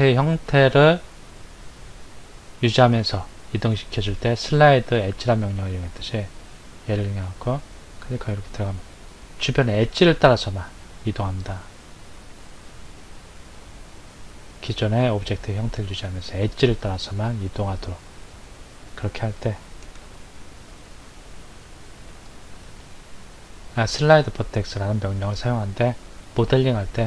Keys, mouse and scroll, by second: 20.1 ctrl+z, 22.1-25.3 drag.